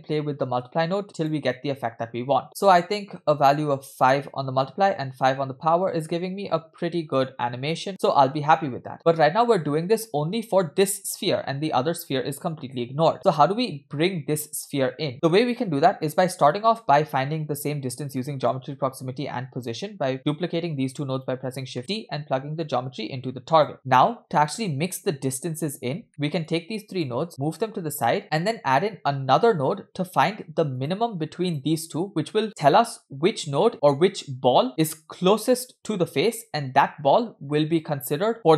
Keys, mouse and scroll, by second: 1.6 space, 14.0 space, 15.1 middle click, 15.1-15.4 scroll down 2, 16.3-16.8 drag, 18.2 middle click, 19.7 shift+d, 21.8 middle click, 21.9-22.2 scroll up 2, 22.9-23.7 drag, 23.7 middle click, 24.1 scroll down 1, 25.2-26.0 scroll down 2, 26.0 scroll down 1, 26.1 middle click, 26.5-27.1 drag, 27.3 click, 28.3 middle click, 28.6-29.4 scroll up 3, 30.8 click, 31.5 click, 32.4 click, 33.7 click.